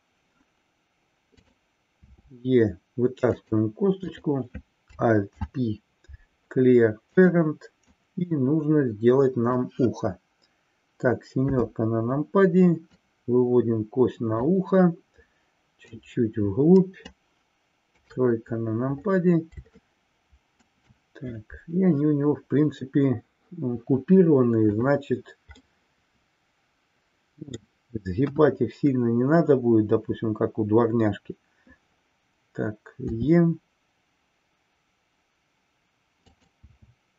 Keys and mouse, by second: 1.3 click, 3.4 click, 5.4 alt+p, 7.8-9.7 drag, 11.4 KP_7, 13.1-14.5 drag, 15.8-17.1 drag, 17.9 KP_3, 19.9 shift+middle click, 25.7-27.8 middle drag, 28.3 KP_1.